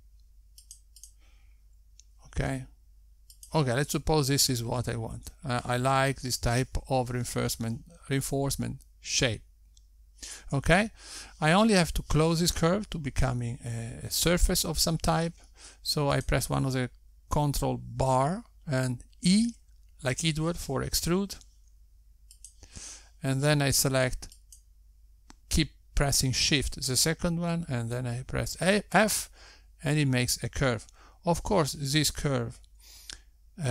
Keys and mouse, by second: 1.6 g, 3.3 click, 4.2 g, 7.4 Tab, 12.7 Tab, 18.6 click, 21.7 e, 26.8 shift+click, 30.8 f.